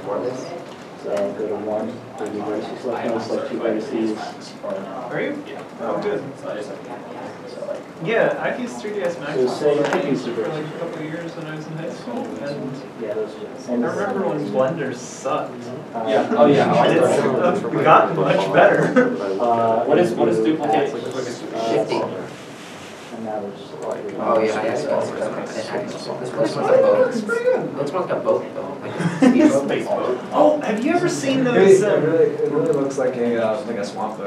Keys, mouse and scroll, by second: 5.1 shift+p, 5.4 r, 5.6 s, 6.1 o, 6.7 Return, 8.6 middle click, 9.2 middle click, 16.3 shift+middle click, 16.3 scroll down 1, 19.0 ., 19.4-20.0 scroll, 20.0-20.4 scroll down 1, 20.9 scroll up 1, 21.5 middle click, 25.1 scroll down 1, 29.8 middle click, 30.4 r, 30.4 right click, 30.6 middle click, 30.8 r, 32.5 right click, 32.8 middle click, 33.3 alt+a, 33.8 Delete.